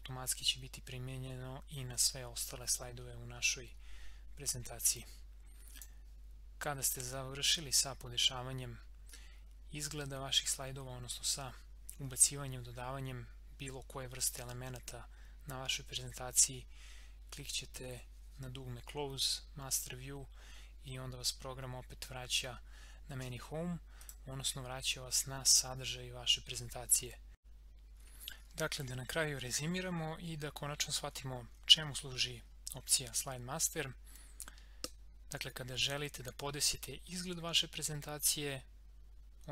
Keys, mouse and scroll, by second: 0.4 scroll down 1, 3.0 scroll up 1, 5.8 click, 7.1 scroll up 1, 24.0 click, 27.0 scroll down 1, 27.4 click, 27.9 scroll down 1.